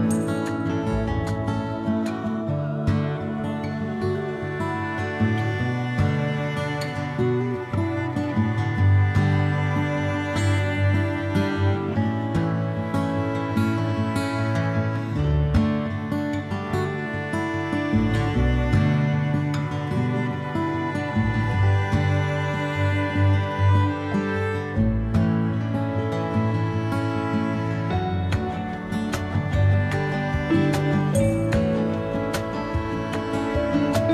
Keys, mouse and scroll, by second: 0.4-3.3 drag, 2.4 ctrl+z, 3.3-4.8 middle drag, 4.8-11.3 drag, 8.4 ctrl+z, 10.0 Tab, 11.3-13.0 middle drag, 14.2 g, 17.6 g, 20.0 a, 20.2 a, 20.6-34.1 ctrl+middle drag, 20.9 ctrl+s.